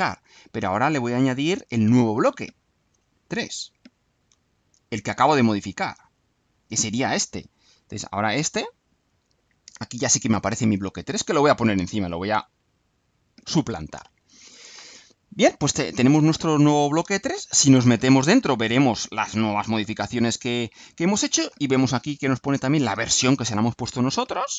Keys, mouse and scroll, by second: 1.2 click, 2.7 click, 4.3-5.4 alt+drag, 5.7 click, 6.7 click, 11.2-12.7 drag, 17.5 click.